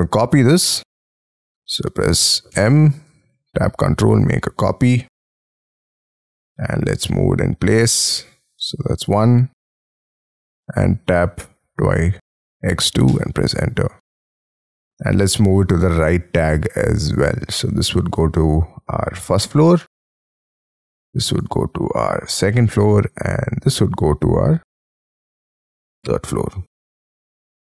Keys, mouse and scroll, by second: 0.8-2.1 scroll up 23, 2.6 m, 4.3-4.9 scroll down 11, 5.4 scroll, 5.6 scroll up 1, 6.1 scroll down 5, 6.5-7.4 scroll up 9, 8.5-9.4 scroll down 17, 11.1 x, 11.7 2, 13.1 Return, 14.0 middle click, 15.0 space, 27.5 Escape.